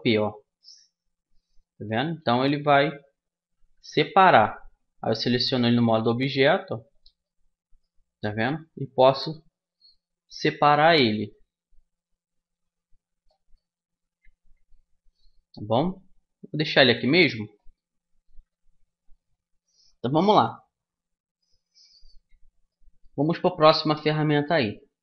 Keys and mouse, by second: 1.7 g, 2.5-3.5 drag, 3.5 Tab, 5.1 g, 9.2 middle click, 9.4-10.6 middle drag, 12.2-14.2 drag, 14.2 middle click, 16.4-18.4 drag, 18.4-22.0 middle drag, 22.4-24.4 middle drag.